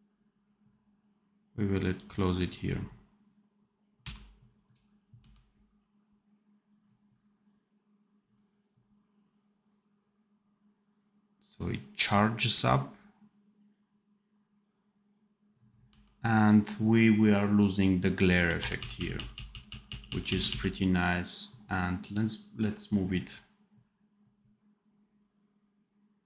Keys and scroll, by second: 3.9 Delete, 5.1 d, 15.8 d, 18.2 f, 19.1 f, 19.8 f.